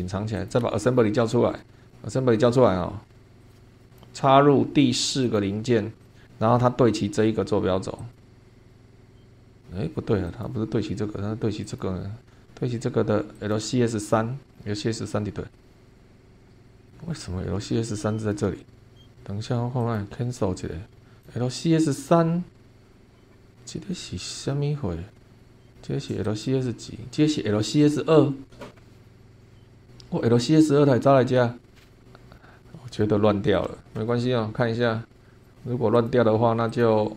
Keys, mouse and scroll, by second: 0.4 click, 0.6 space, 0.9-1.5 scroll down 2, 1.6 middle click, 3.4 shift+middle click, 3.8 click, 5.2 click, 6.0 click, 6.2 scroll up 1, 8.0 click, 10.3 click, 11.6 click, 13.3 click, 14.5-15.0 scroll down 2, 15.5-17.0 middle drag, 17.8-18.5 shift+middle drag, 19.8 click, 20.6-21.2 scroll down 2, 21.2 click, 22.9-23.5 scroll up 2, 23.9-25.3 drag, 25.4 scroll up 1, 26.2 click, 29.0-29.3 scroll down 3, 29.4-29.9 scroll up 6, 31.7 scroll down 2, 32.2 scroll up 2, 32.6 scroll down 2, 33.0 shift+click, 33.4 shift+middle click, 35.4 click, 36.0 click, 36.6 click.